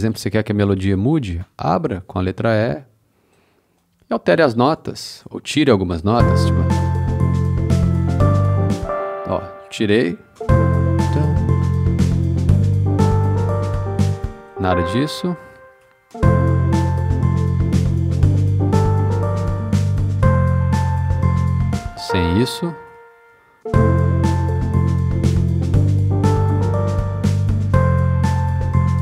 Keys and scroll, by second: 1.4 e, 7.1 space, 8.5 space, 10.0 BackSpace, 10.3 space, 13.9 space, 15.8 BackSpace, 21.5 space, 22.8 BackSpace.